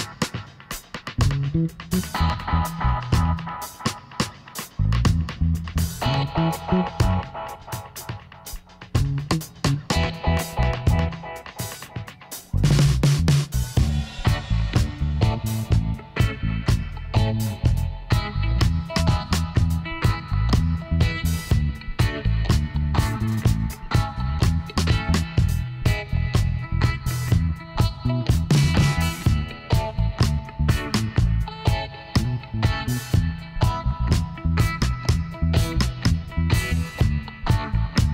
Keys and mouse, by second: 0.8-2.6 middle drag, 2.6 g, 4.5 s, 6.1-7.5 middle drag, 7.5 g, 9.4 s, 11.9-18.8 middle drag, 15.6 s, 21.6-23.1 middle drag, 21.9 Tab, 23.2 KP_1, 25.5-26.7 drag, 26.5 right click, 26.6 KP_1, 29.9-31.4 drag, 31.8-35.9 drag, 36.7 e.